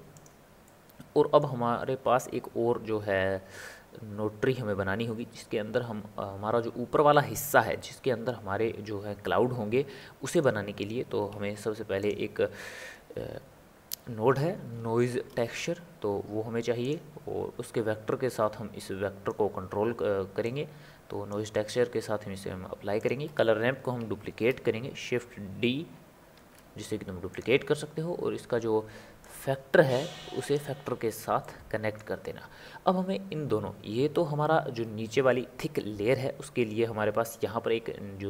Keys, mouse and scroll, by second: 0.6-10.5 middle drag, 10.5 click, 11.4 shift+a, 18.5 click, 20.6 click, 23.2-26.0 drag, 26.3 shift+d, 29.4 click, 31.4-34.4 middle drag.